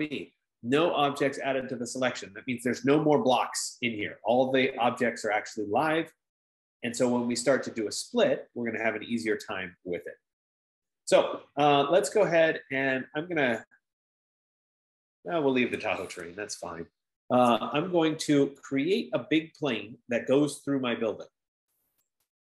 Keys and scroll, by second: 2.2-2.9 typing, 17.0 Escape.